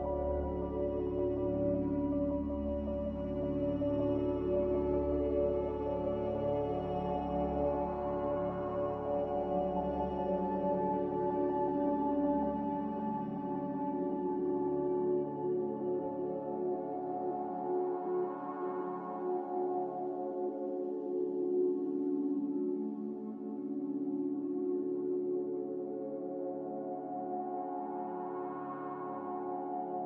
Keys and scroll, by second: 0.8 s, 9.6 a, 20.2 ctrl+x, 26.3 ctrl+c, 28.3 ctrl+g.